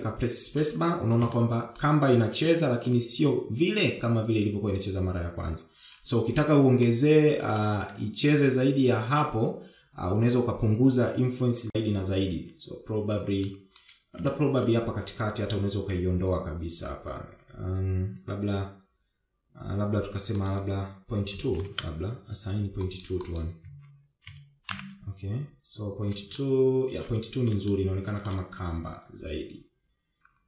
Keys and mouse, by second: 1.3 shift+middle click, 6.7-7.6 shift+middle drag, 12.1 Tab, 13.3 shift+middle click, 14.1 shift+middle click, 20.2-22.0 drag, 22.7 click, 23.1 click, 23.7 Tab, 24.6 shift+Left, 26.4 shift+middle click, 27.7 shift+middle click.